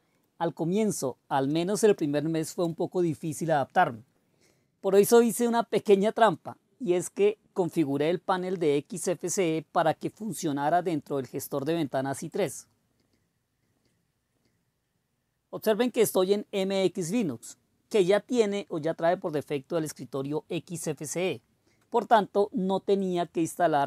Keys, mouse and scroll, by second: 0.2 super+2, 1.5 super+d, 1.7-2.6 typing, 2.6 Return.